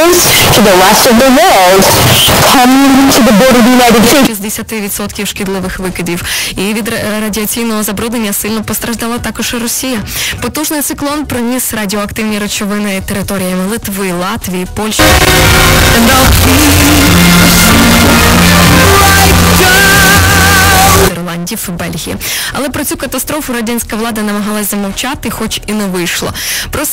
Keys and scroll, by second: 4.2 Page_Down, 21.6 Page_Down.